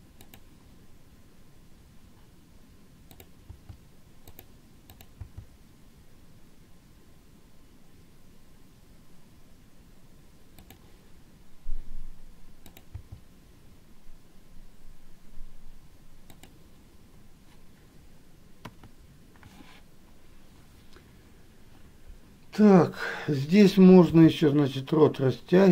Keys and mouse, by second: 3.4 click, 5.1 click, 19.0 KP_1.